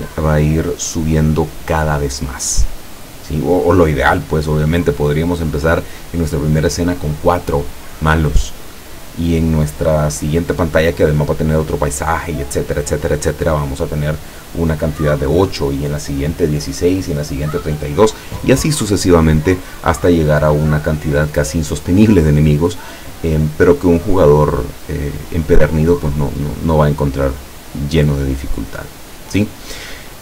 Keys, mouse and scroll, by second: 24.1-24.6 scroll down 1, 25.0 scroll up 1, 26.1 scroll down 2, 26.8 scroll up 2, 27.6 scroll down 2, 28.5 scroll up 2.